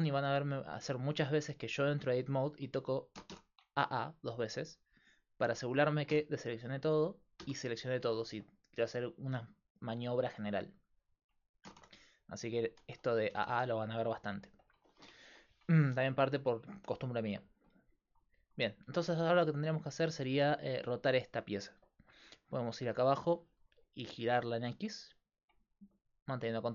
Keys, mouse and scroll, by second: 0.9 Tab, 1.9 Tab, 3.2 a, 3.4 a, 6.1 a, 7.4 a, 11.7 a, 11.8 a, 13.3 a, 13.5 a, 14.3 middle click, 19.6 middle click, 23.1-26.7 drag.